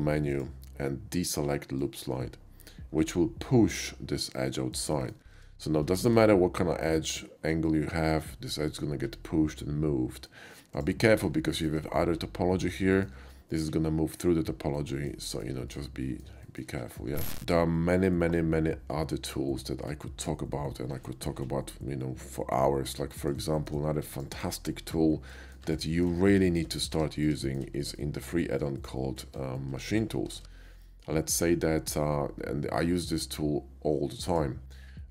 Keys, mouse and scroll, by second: 0.3 click, 1.8 click, 4.4 middle click, 5.0 click, 5.4 ctrl+z, 6.2 ctrl+b, 10.8 click, 11.0 middle click, 11.6 shift+middle click, 12.9 shift+middle click, 13.2 shift+middle click, 14.8 shift+middle click, 15.3 shift+middle click, 15.7 shift+middle click, 16.5 shift+middle click, 16.9 shift+middle click, 22.9-23.3 middle drag, 23.6 shift+middle click, 24.1 shift+click, 25.3 shift+middle drag, 26.1 KP_5, 26.5 middle click, 26.9 Tab, 27.5 middle click, 28.0 middle click, 28.5 `, 29.2 Tab, 29.7 x, 29.8 Tab, 29.9 click, 30.5 shift+a, 34.3 click, 35.0 shift+middle click.